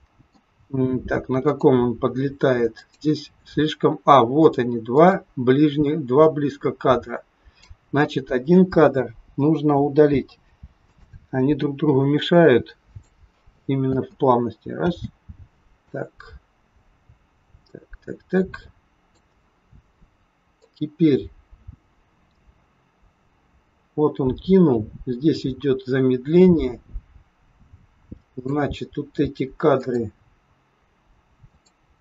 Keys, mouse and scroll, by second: 1.5 click, 2.7 click, 10.1 Delete, 12.3 click, 13.7 space, 14.7 space, 15.8 click, 20.4 click, 29.8 click, 31.5 click.